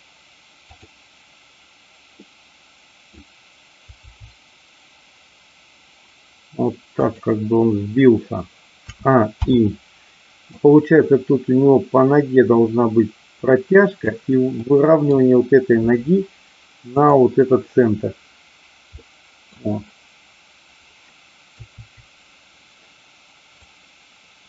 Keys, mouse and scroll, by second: 0.7-1.7 drag, 2.3-3.1 middle drag, 3.9 g, 7.0 click, 8.9 a, 9.4 i, 10.5-14.1 drag, 14.7 middle click, 16.9 click, 18.9-19.5 middle drag, 21.4 KP_4, 23.5-24.4 drag.